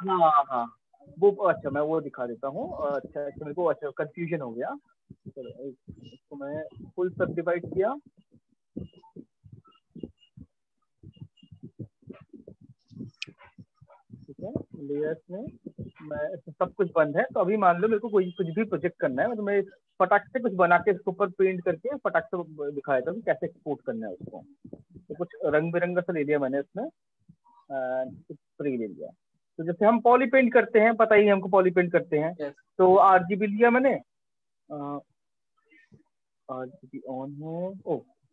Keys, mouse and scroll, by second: 2.5 alt+click, 3.5 right click, 4.3 right click, 5.2 click, 6.5 click, 13.2 click, 14.3 click, 16.9 alt+click, 19.1 click, 21.7 click, 22.1 click, 24.7 click, 26.5 click, 27.3 click, 30.3 click, 34.4 click.